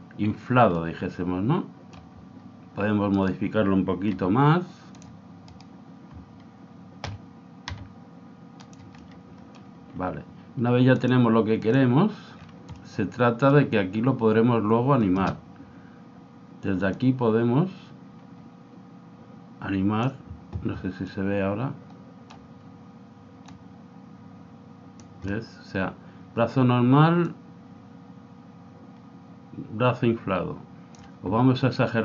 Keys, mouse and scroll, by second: 0.7-2.5 middle drag, 3.2-5.0 right drag, 4.2 g, 5.5-7.3 right drag, 7.1 o, 7.7 g, 9.0-10.0 middle drag, 11.0 click, 12.4-14.5 middle drag, 16.9 click, 21.1-22.8 middle drag, 23.5 click, 27.2 click.